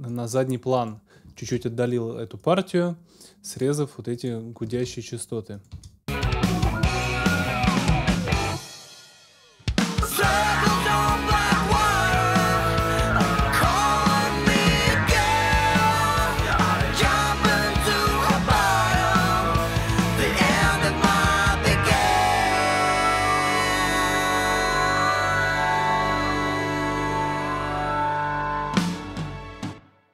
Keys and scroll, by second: 1.4 super+s, 4.7 super+s, 5.7 super+space, 29.4 space.